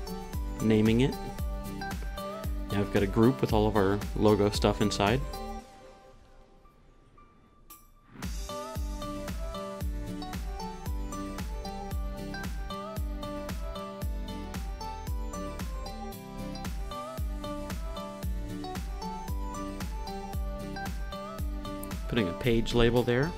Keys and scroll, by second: 1.6-2.0 typing, 2.1 Return, 6.6-7.7 typing, 9.7-11.2 typing, 11.4 Return, 12.6 Down, 13.9 Right, 14.1 Up, 14.2 Right, 19.3 Down, 20.1 super+s, 21.2 t, 22.3-23.3 typing.